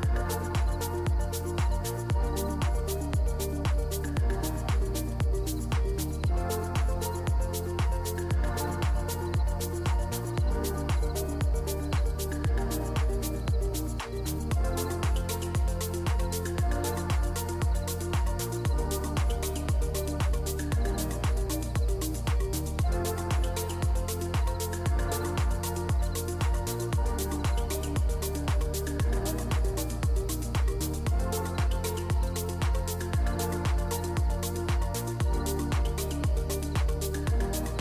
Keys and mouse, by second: 1.1 s, 3.9 KP_Decimal, 4.6 click, 5.0 Tab, 6.1-9.0 typing, 10.1 e, 10.9 s, 12.9 a, 13.3 z, 13.8 click, 14.2 e, 15.9 a, 16.4 shift+n, 16.7 Tab, 17.3 drag, 17.7 Tab, 18.0 2, 18.6 alt+click, 19.1 click, 19.8 shift+d, 20.6 p, 21.2 Tab, 21.6 click, 24.4 Tab, 24.7 a, 25.3 g, 27.0 KP_1, 27.9 g, 29.5 Tab, 30.2 q, 35.6-37.5 shift+drag.